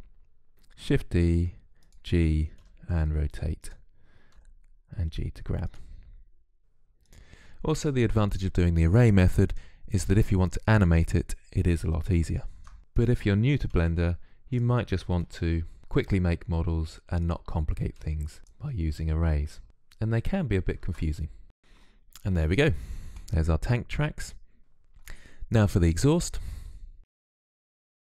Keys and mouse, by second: 0.0-6.6 typing, 8.5-13.4 typing, 14.6-21.0 typing, 21.3 click, 21.5 click, 23.8 middle click, 27.0 KP_3.